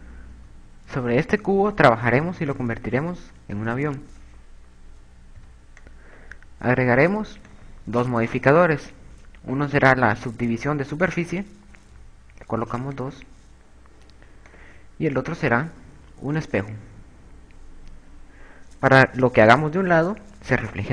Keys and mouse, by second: 0.1 KP_6, 1.2 KP_6, 1.8 KP_8, 3.6 KP_4, 5.3 b, 6.1 click, 8.1 click, 11.7 click, 15.0 click, 18.8 a.